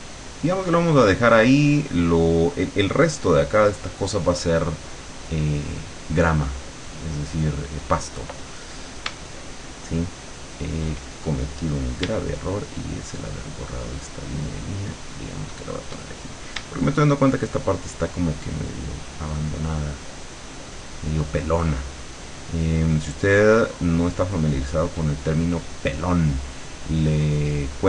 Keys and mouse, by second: 0.2-2.5 drag, 5.9 click, 8.1 click, 13.2-15.9 shift+drag, 17.4 shift+click, 18.3-21.4 shift+drag, 23.0-24.9 shift+drag, 27.4 click.